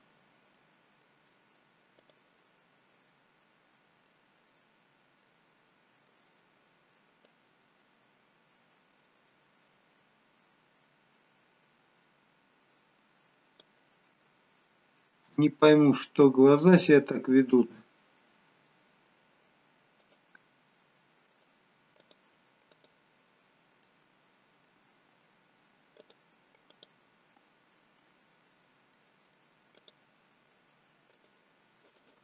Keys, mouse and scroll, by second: 0.6 middle click, 2.1 click, 2.7-3.2 scroll up 1, 3.2 scroll down 1, 3.5-4.1 scroll down 2, 4.1 middle click, 7.7 click, 14.7 shift+middle click, 15.4-16.0 scroll up 3, 16.0 scroll up 2, 16.1 shift+middle click, 17.6 middle click, 20.1 click, 21.4 click, 22.8 click, 23.8 middle click, 26.1 click, 26.8 click, 28.6-29.0 scroll down 1, 29.0 middle click, 30.0 click, 31.1 shift+click, 31.9 click.